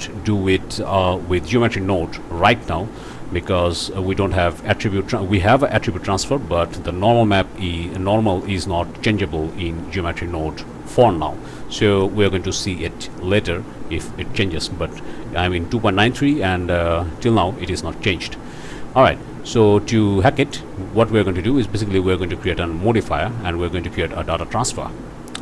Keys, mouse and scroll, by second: 1.4 click, 12.0 click, 18.3 scroll up 2, 22.2 click, 24.3 click.